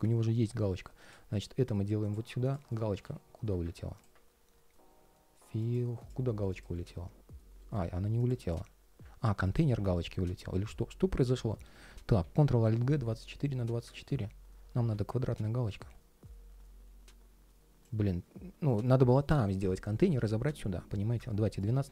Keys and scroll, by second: 2.7 super+z, 6.5 ctrl+shift+3, 8.0 ctrl+shift+3, 11.9 alt+super+g, 18.3 super+z.